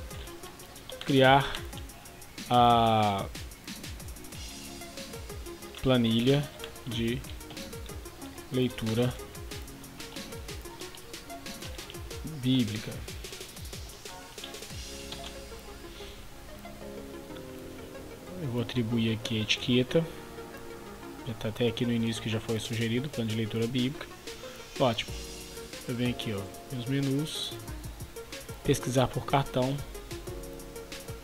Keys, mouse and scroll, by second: 0.0-2.4 typing, 4.1-14.9 typing, 15.1 Return, 16.5 Escape, 18.1 click, 30.3-30.7 scroll down 1, 30.8-31.2 scroll up 1.